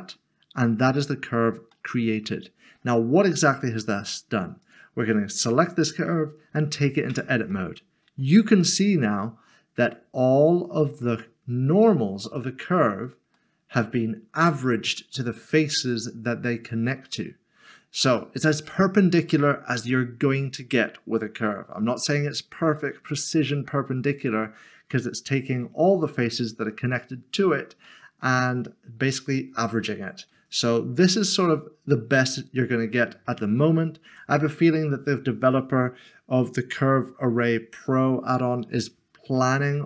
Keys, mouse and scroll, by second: 1.7 middle click, 4.6 middle click, 7.1 click, 8.0 scroll up 1, 8.6 scroll up 1, 8.8 middle click, 11.6 middle click, 11.8 scroll up 1, 12.2 middle click, 12.7 scroll down 1, 13.4 middle click, 27.9 middle click, 31.2 middle click, 34.1 Tab, 39.4 scroll up 1.